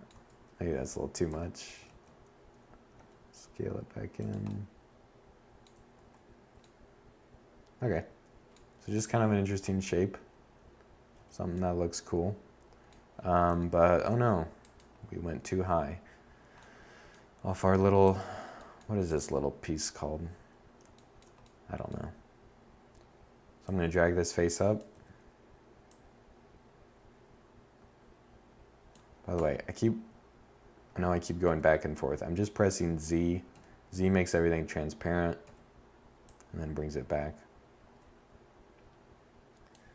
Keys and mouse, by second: 1.0 s, 4.0 Tab, 7.0 7, 9.2 z, 13.5 Tab, 17.1-19.0 middle drag, 23.0 z, 27.4 z, 29.5 z, 31.6 z, 33.5 z, 34.3-36.2 drag, 39.0 e, 39.4 click.